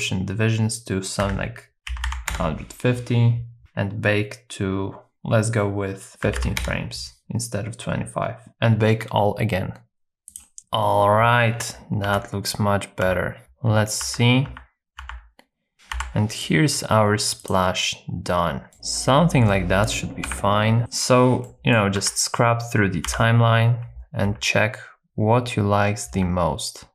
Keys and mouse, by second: 3.6-6.8 drag, 12.1 Right, 13.1 Right, 13.4 Left, 13.7 Right, 14.1 Right, 14.5 Right, 15.1 Right, 15.7 Left, 16.0 Right, 18.7 middle click, 20.2 Down, 21.5 middle click, 22.1 Right, 23.1 KP_0, 23.9 Left, 24.3 Left, 26.2 Right.